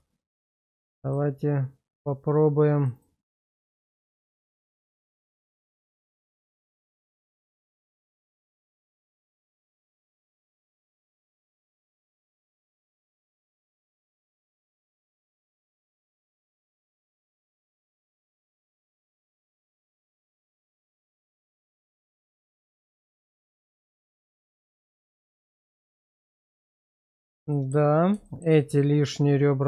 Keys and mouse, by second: 0.4 Tab, 4.2 alt+shift+click, 5.2 alt+shift+click, 5.9 middle click, 8.6 ctrl+x, 9.2 shift+middle click, 9.6 Tab, 10.1-14.3 middle drag, 14.4 Tab, 15.1 shift+middle click, 15.5-16.5 middle drag, 16.8 shift+middle click, 17.4-19.1 middle drag, 19.6 shift+middle click, 22.6 ctrl+x, 23.0 middle click, 23.7 Tab, 24.2-25.4 middle drag, 25.9 shift+middle drag, 26.4-27.2 middle drag, 27.5 shift+middle drag, 28.2 middle click, 28.8-29.6 middle drag.